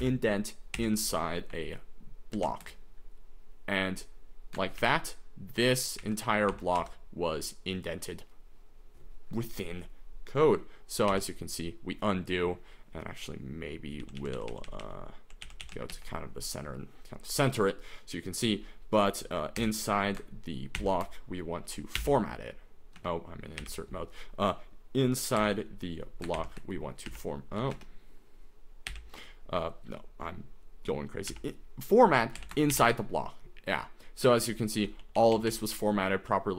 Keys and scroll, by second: 0.0 =, 0.8 i, 2.4 }, 4.8-6.8 typing, 11.1 u, 14.2-16.4 typing, 19.6 i, 20.8 shift+[, 22.0 =, 23.0 Escape, 23.6 u, 25.4 i, 26.4 {, 27.2 =, 27.7 Escape, 28.9 u, 31.3 =, 32.4 i, 32.7 {, 34.3-36.5 typing.